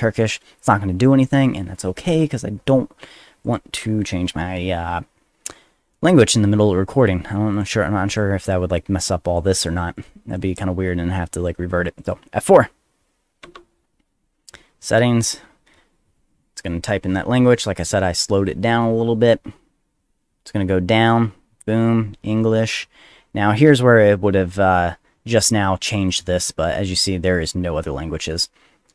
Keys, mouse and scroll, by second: 0.2 click, 3.4 click, 7.5 click, 8.1 click, 9.1 click, 9.6 click, 10.0 click, 10.3 click, 12.0 click, 13.4 F4, 18.9 g, 26.0 click.